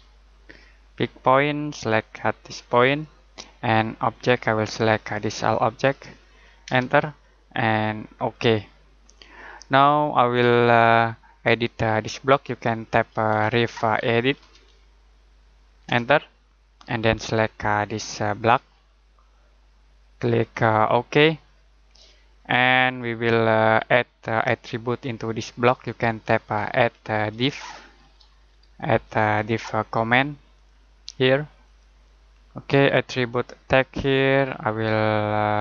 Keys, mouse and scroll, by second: 0.0-0.3 typing, 1.2 click, 6.6 space, 8.1 click, 9.1 middle click, 13.0-15.0 typing, 15.8 Return, 18.3 click, 23.7-24.1 scroll up 1, 24.2 middle click, 26.3-29.2 typing, 31.6 click.